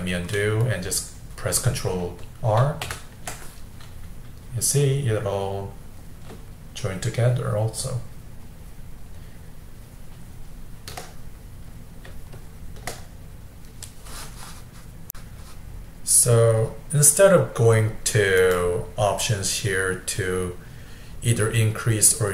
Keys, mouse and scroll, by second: 2.9 ctrl+r, 4.5-6.8 middle drag, 6.8-9.9 shift+drag, 11.3-12.4 middle drag, 12.4-15.1 shift+drag, 15.1 shift+middle click, 18.4-21.5 drag.